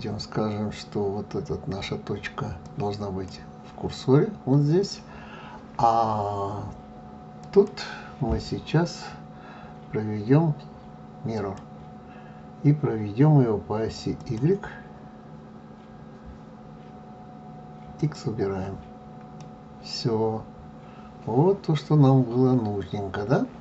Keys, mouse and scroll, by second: 7.4-10.4 drag, 14.2 click, 18.0 click, 19.4-22.4 middle drag.